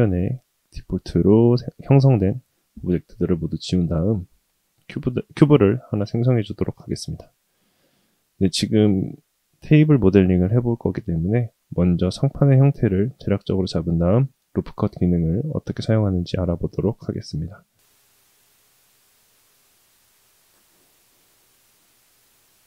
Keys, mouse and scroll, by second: 3.5 shift+a, 5.0 scroll up 1, 8.0-8.4 scroll up 1, 17.7 middle click, 18.1 s, 21.5 middle drag, 21.8 scroll down 3, 22.1 s.